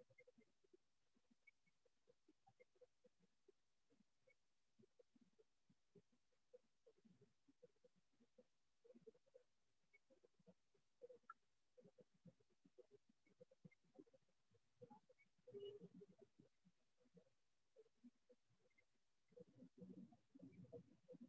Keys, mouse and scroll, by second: 1.0 click, 4.0 click, 5.3 click, 5.9 click, 6.5 click, 6.9 click, 8.0 click, 8.4 click, 10.0 ctrl+z, 10.4 ctrl+z, 11.8-12.4 scroll, 12.1-12.4 click, 12.7 click, 13.2 click, 13.3 click, 13.5 click, 14.4 click, 15.2 click, 17.2 shift+click, 17.4-19.8 shift+click, 19.0-19.4 scroll, 19.4 click, 19.6 click, 19.7 click, 19.9 click, 20.8 click.